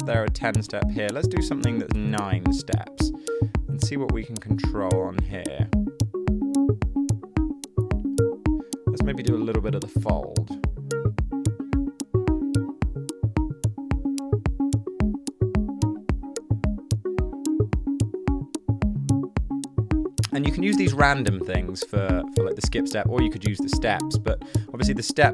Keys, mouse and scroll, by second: 2.0 9, 2.1 Return.